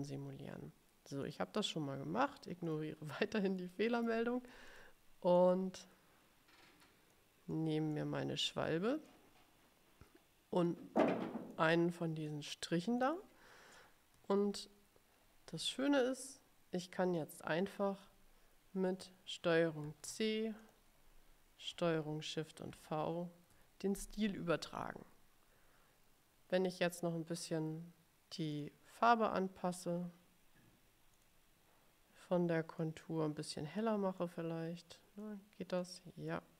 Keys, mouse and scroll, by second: 1.4 click, 2.7 click, 3.7 middle click, 3.7-4.3 scroll down 1, 4.8 click, 5.4-7.4 drag, 7.7 middle click, 9.1-11.0 drag, 11.3 click, 11.7 middle click, 12.3 click, 14.4-14.8 ctrl+scroll up 2, 15.3 ctrl+scroll up 2, 17.2-18.3 drag, 19.9 ctrl+c, 20.7 click, 22.8 ctrl+shift+v, 28.6 click, 31.2 click, 32.9-34.5 drag, 34.9 click, 35.9 click.